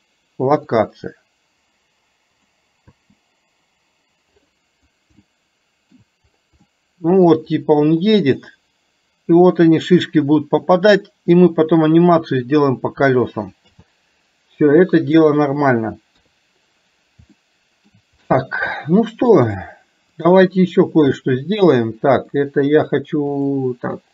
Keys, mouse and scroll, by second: 2.6 click, 5.3-6.2 shift+middle drag, 6.8-7.4 middle drag, 15.2 click, 17.3-18.0 shift+middle drag, 18.7-19.6 shift+middle drag, 20.2 click, 22.3 middle click, 23.5 click.